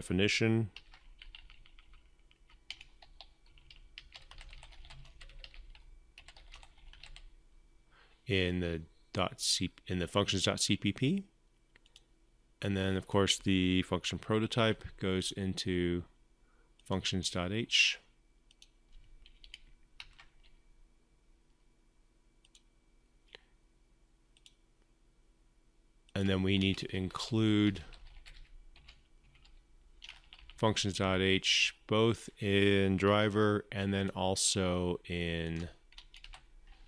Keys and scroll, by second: 0.5 ctrl+v, 14.0 ctrl+x, 19.6 ctrl+v, 32.7 ctrl+c, 36.0 ctrl+v.